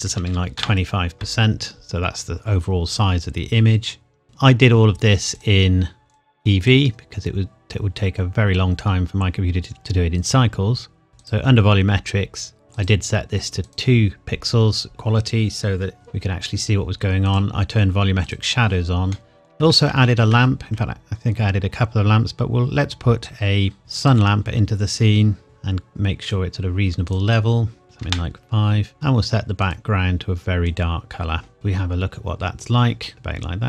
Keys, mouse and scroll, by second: 0.1 KP_2, 0.3 KP_5, 0.6 KP_Enter, 4.2 click, 11.2 click, 11.7-12.2 scroll down 1, 12.7 click, 15.9 scroll down 1, 17.3 click, 19.1 middle click, 19.9 shift+a, 24.0 click, 24.6 scroll down 1, 25.4 click, 27.8 KP_5, 28.0 KP_Enter, 28.9 click, 32.9-33.6 scroll up 1.